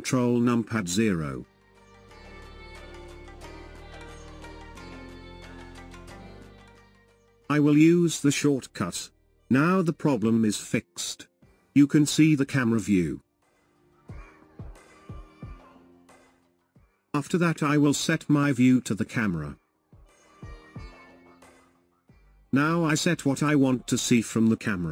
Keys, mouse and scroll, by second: 7.9 ctrl+KP_0, 10.0-13.0 middle drag, 13.0 KP_0, 15.1-24.5 shift+middle drag, 24.5-24.9 scroll up 1.